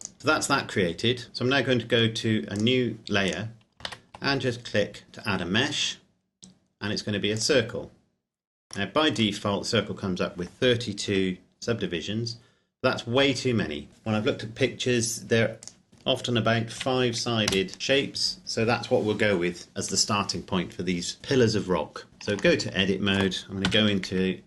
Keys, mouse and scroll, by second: 0.0 click, 2.6 click, 3.9 shift+a, 7.4 click, 8.8-11.2 scroll up 1, 11.2 KP_7, 15.8 click, 16.8 KP_5, 17.5 KP_Enter, 22.0 scroll down 1, 22.1 Tab, 22.6 shift+middle click, 23.6 KP_5.